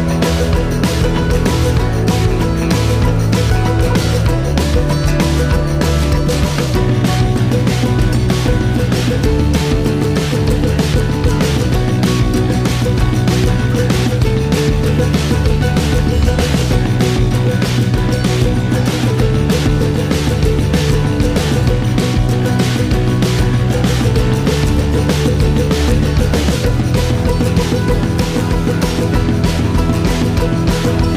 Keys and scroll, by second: 5.6-8.5 typing, 10.9-12.4 typing, 15.0-19.1 typing.